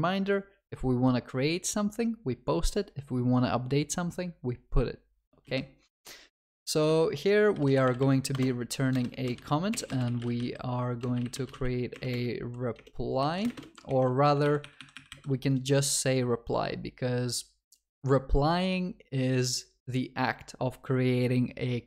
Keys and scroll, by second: 14.3 Delete.